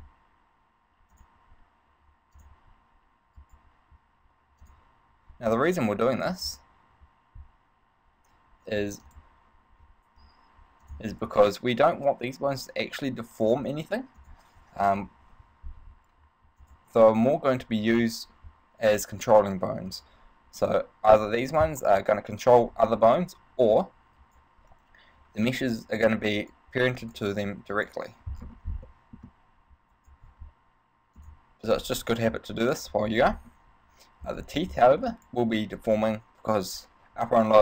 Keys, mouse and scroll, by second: 0.1 z, 1.4 click, 2.6 click, 3.6 right click, 4.8 click, 6.4 click, 9.2 click, 11.2 click, 16.8 click, 18.2 right click, 19.4 click, 20.2 right click, 21.4 click, 24.4 right click, 25.8 click, 26.6 right click, 27.2 right click, 27.9 right click, 28.6-29.1 scroll down 4, 29.1 shift+middle click, 30.2 right click, 31.4 click, 32.0 scroll down 3, 32.4 shift+middle click, 33.3 shift+middle click, 33.5 scroll up 3, 34.6 right click, 35.3 right click, 36.0 right click.